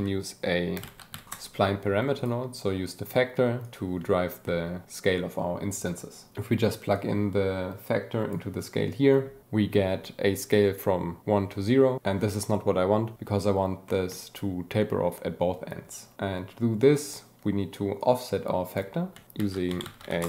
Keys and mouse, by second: 1.1 a, 2.1 click, 3.6 click, 6.9-8.2 drag, 13.8 click, 17.9 click, 19.4 shift+a.